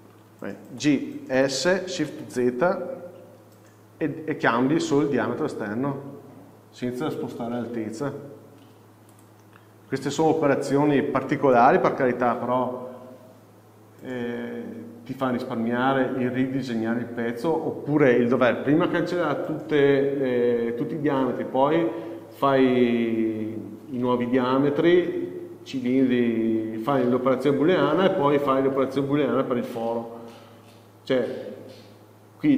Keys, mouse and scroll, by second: 9.7 scroll up 1, 10.2 scroll down 1, 12.0 Tab.